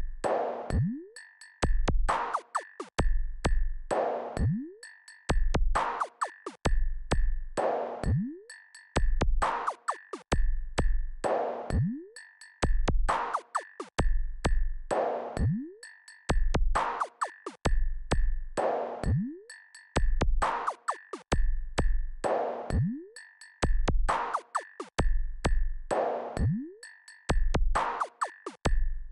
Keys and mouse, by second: 5.9-12.2 drag, 15.0 KP_Add, 15.4-17.8 KP_Add, 28.9-29.1 drag.